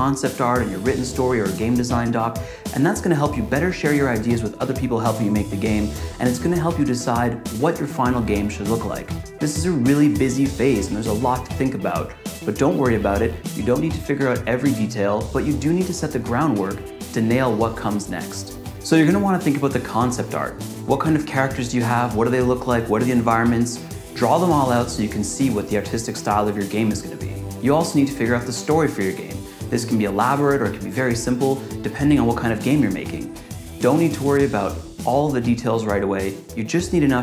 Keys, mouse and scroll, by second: 0.0 click, 0.2 typing, 0.3 scroll down 1, 0.3 click, 0.5 scroll up 1, 0.6 click, 0.7 click, 0.9 click, 18.7 click, 19.1-20.6 typing, 19.2 click, 19.5 click, 19.7 click, 20.4 click, 20.5 click, 20.6 click, 21.1 click, 21.8 click, 22.0 click, 22.2 z, 22.4 click, 22.7 click, 22.9 z, 23.1 click, 23.1 click, 23.6 click, 23.9 z, 24.0 click, 24.3 click, 24.7 click, 25.8 click, 26.0 click, 26.3 z, 26.4 click, 26.6 click, 26.7 click.